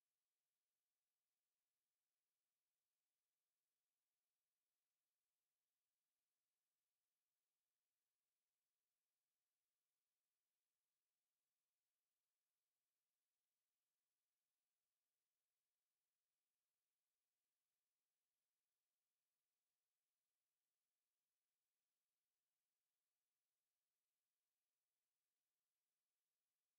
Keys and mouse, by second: 0.4 alt+click, 1.5 click, 2.6 shift+click, 3.7 g, 4.1 click, 6.5 shift+click, 7.8 g, 9.2 click, 10.1 shift+click, 11.6 g, 12.6 alt+right click, 13.2 alt+click, 14.3 alt+click, 15.0 click, 15.8 shift+click, 16.9 g, 17.0 g, 17.6 click, 18.7 shift+click, 19.7 g, 20.7 click, 21.6 shift+click, 23.6 click, 24.6 shift+click, 25.9 g, 26.4 alt+click.